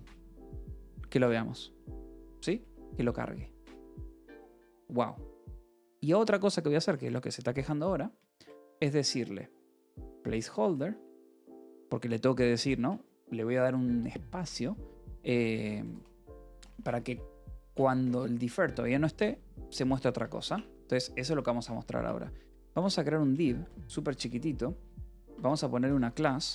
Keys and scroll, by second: 3.0 j, 3.7 k, 4.9 j, 5.3 a, 5.6 space, 8.7-11.9 typing, 12.6 Return, 15.3-20.1 typing, 20.4 Tab, 21.8 BackSpace, 23.0-26.5 typing, 24.5 Right.